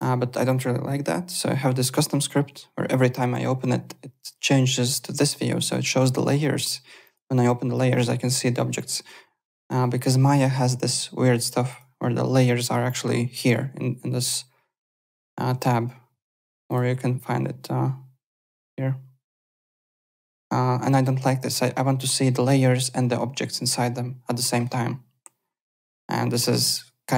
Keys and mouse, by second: 1.5 o, 3.1 o, 7.0 click, 11.6 click, 16.6 click, 19.8 click, 26.0 click.